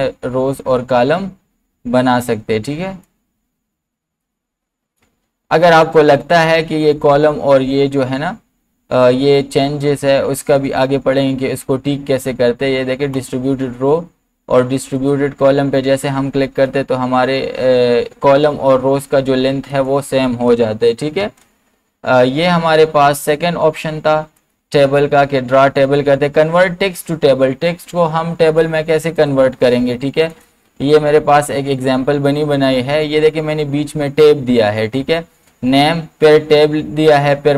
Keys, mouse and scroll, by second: 3.2-6.6 drag, 13.1 click, 19.7 click, 21.2 BackSpace, 23.3 click, 29.2 click, 31.7 click.